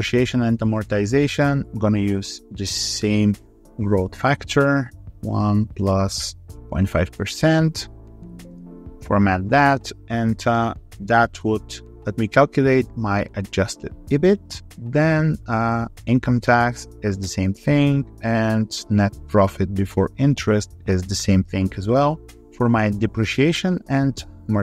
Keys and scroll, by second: 7.9 alt+2, 8.1 3, 11.8 ctrl+r, 16.8 ctrl+r, 19.1 ctrl+r.